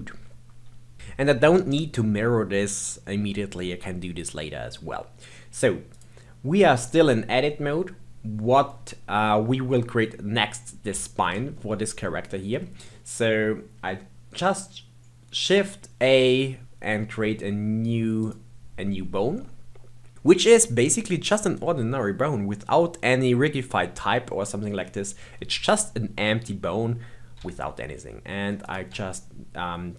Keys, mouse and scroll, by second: 5.9 click, 11.5-12.8 shift+middle drag, 12.8-15.3 scroll down 1, 15.4 shift+a, 18.2 click, 27.4 s.